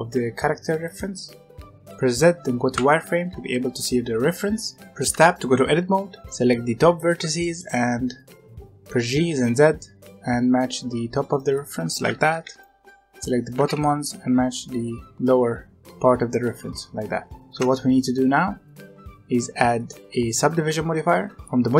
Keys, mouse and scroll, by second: 2.0 z, 5.0 Tab, 6.2 b, 7.3-8.9 shift+middle drag, 8.9 g, 12.0 alt+a, 12.4 b, 13.5 g, 17.5 Tab, 19.7 click, 21.2 click.